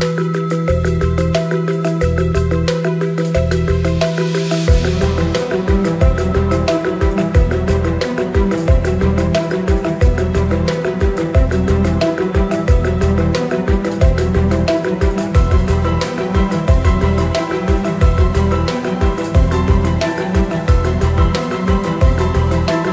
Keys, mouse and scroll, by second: 1.1 click, 2.2 click, 3.5 click, 6.4 shift+click, 6.9 KP_7, 7.8 middle click, 8.6 shift+a, 10.1 s, 13.4 click, 13.5-15.2 drag, 17.2 click, 17.5 shift+click, 19.3 click, 20.0 shift+a, 21.5 s.